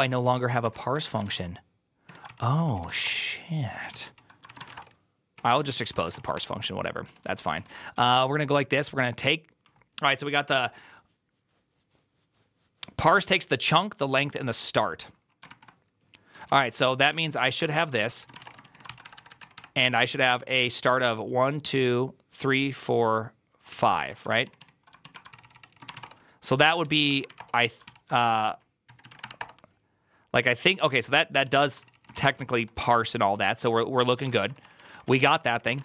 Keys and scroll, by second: 0.0-8.3 typing, 1.9 Tab, 2.1 ctrl+c, 2.3 ctrl+c, 3.8 ctrl+c, 16.0-20.9 typing, 23.9 typing, 24.2 ctrl+a, 24.3 ctrl+a, 24.5 ctrl+a, 24.9 ctrl+a, 25.1 ctrl+c, 25.3 ctrl+c, 25.5-29.5 typing, 26.5 ctrl+a, 27.7 ctrl+c, 31.3-35.8 typing.